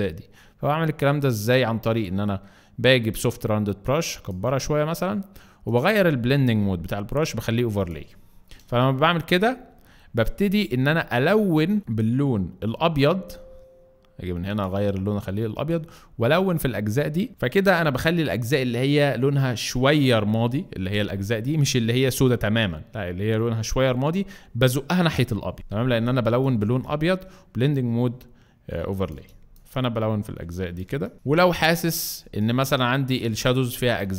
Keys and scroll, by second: 12.6 x, 25.7 space.